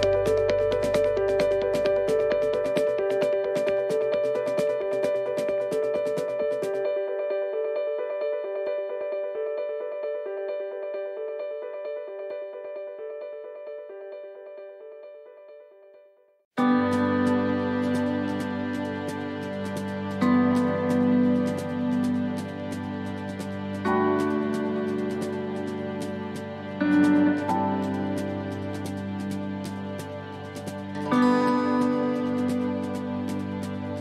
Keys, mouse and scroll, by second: 0.6 click, 0.6 middle click, 3.4 click, 5.6 ctrl+z, 6.9 click, 9.1 shift+middle click, 9.7 scroll down 2, 10.0 middle click, 10.6 shift+middle click, 11.2-12.1 scroll up 2, 12.2 shift+middle click, 13.1 scroll up 1, 13.5 middle click, 15.8 s, 17.7 click, 22.7 shift+middle click, 24.6 scroll up 2, 25.2 middle click, 26.2-26.9 scroll down 3, 26.9 middle click, 29.9 middle click, 31.9 shift+d, 33.4 click.